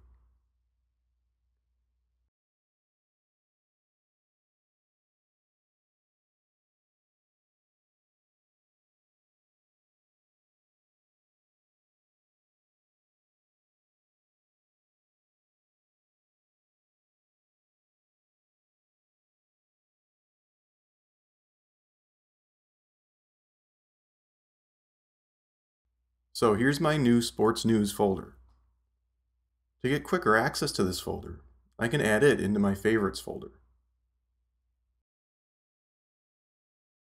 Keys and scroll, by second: 16.8-18.3 typing, 18.7 Return.